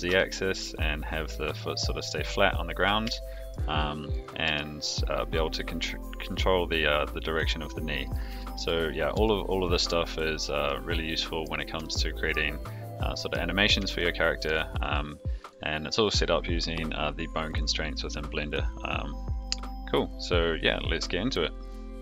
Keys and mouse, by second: 3.1-3.5 shift+middle drag, 4.0 click, 4.4 g, 8.3 a, 9.1 alt+g, 9.6 alt+r, 10.6-11.4 middle drag, 12.6-13.3 middle drag, 13.9-14.5 shift+drag, 14.8 click, 15.4 click.